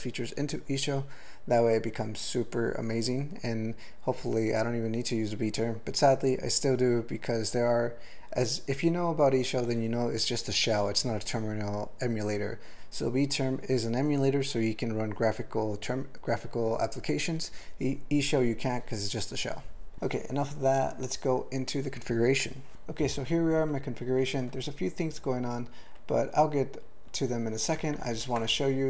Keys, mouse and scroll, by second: 22.7 ctrl+p, 27.8 ctrl+n, 28.0 ctrl+n, 28.1 ctrl+n, 28.5 Tab.